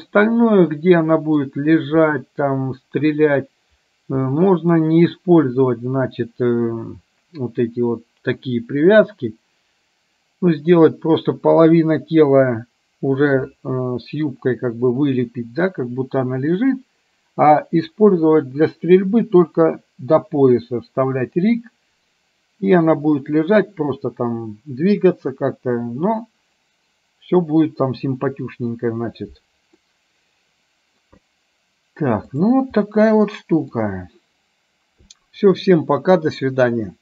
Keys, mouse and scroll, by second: 2.1-3.3 middle drag, 4.3 middle click, 29.8-31.1 middle drag, 33.0 middle click.